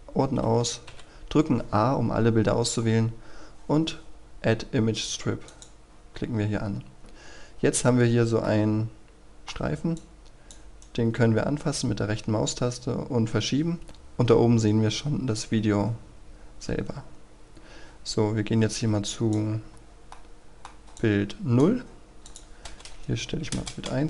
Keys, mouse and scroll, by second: 0.9 a, 5.4 click, 7.4-8.0 scroll up 1, 8.0-8.4 scroll down 1, 8.4-9.9 middle drag, 10.0 click, 10.8-13.8 right drag, 15.4-20.1 drag, 20.1 middle click, 21.0-22.2 drag, 23.3 KP_1, 23.5 Return.